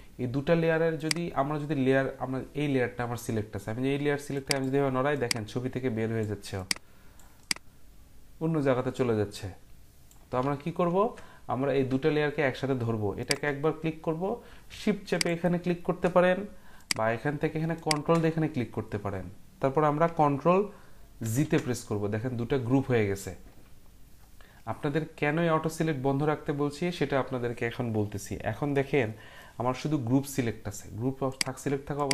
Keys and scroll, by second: 10.4 ctrl+z, 21.2 ctrl+g.